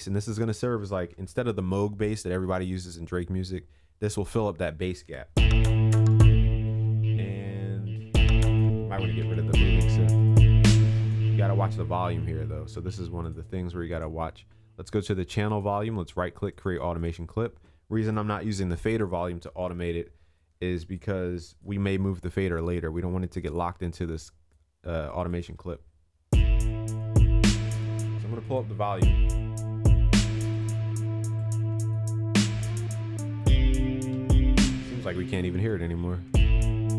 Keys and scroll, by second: 1.1 ctrl+s, 9.2 ctrl+s.